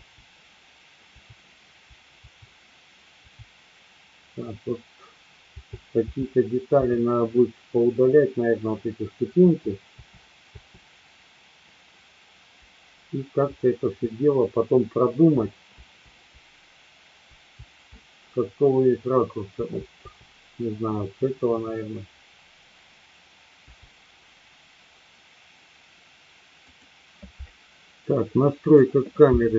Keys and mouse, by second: 0.0 Up, 2.2 Down, 3.2 Down, 5.4 Left, 6.1 Left, 9.4 Left, 9.9 Left, 13.4 Up, 13.9 Up, 16.3-17.2 Up, 19.5 Left, 19.9 Left, 20.9 Down, 21.5 Down, 23.7 Up, 26.7 click, 28.7 click.